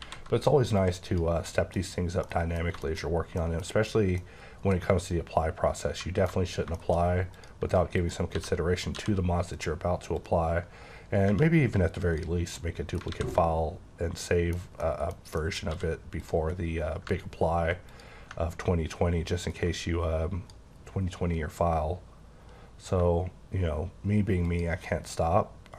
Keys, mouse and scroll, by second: 0.0 alt+v, 0.8 click, 2.2 middle click, 2.8 shift+middle click, 3.1 scroll down 2, 3.4 middle click, 4.2 middle click, 6.5-7.3 scroll up 5, 6.8 shift+middle click, 7.3 click, 8.0 click, 8.3-8.9 typing, 9.5 click, 10.2 click, 12.6 middle click, 13.1 alt+a, 13.3 middle click, 14.8 middle click, 15.4 middle click, 15.7 d, 16.2 click, 17.9 click, 19.5 click, 23.0 shift+click.